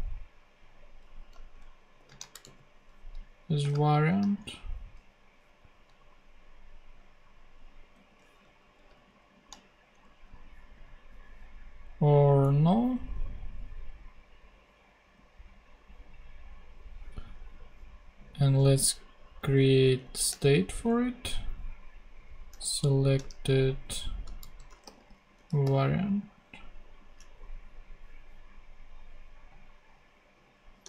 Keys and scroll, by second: 1.1 Left, 1.9 shift+;, 2.0 shift+space, 2.4 shift+super+v, 3.1 super+v, 3.6 shift+space, 8.0 BackSpace, 8.6 alt+Left, 9.0 alt+shift+/, 9.9 shift+/, 18.8 super+Left, 19.4 shift+super+Left, 19.5 shift+super+Down, 20.2 shift+super+Down, 20.3 shift+super+d, 21.3 super+d, 22.7 alt+shift+Right, 24.1-26.1 typing.